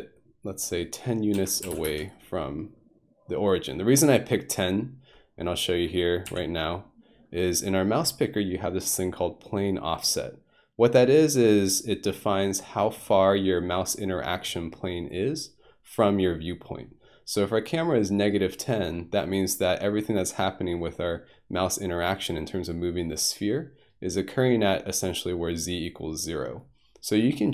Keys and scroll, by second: 1.3-1.7 typing, 1.9 Return, 6.3 typing.